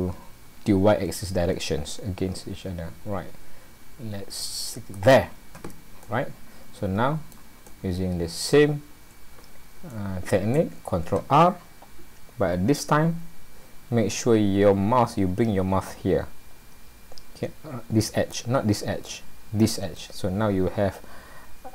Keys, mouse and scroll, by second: 6.0 middle click, 7.7 middle click, 9.0-9.7 scroll up 1, 9.9 shift+middle click, 12.6 ctrl+r.